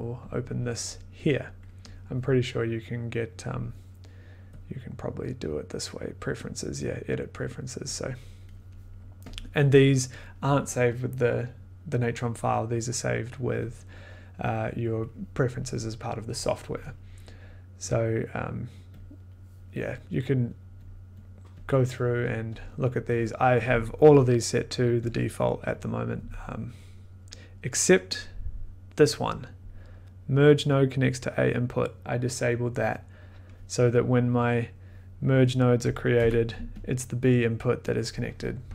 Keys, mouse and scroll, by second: 0.5 click, 3.5 click, 14.0 click, 18.9 click, 20.8 click, 21.1 click, 21.2 click, 21.6 click, 22.3 click, 22.5 click, 25.0 click, 25.4 click, 25.7 click, 29.6 click, 34.7 click, 35.5 click, 36.2 m, 36.9 click.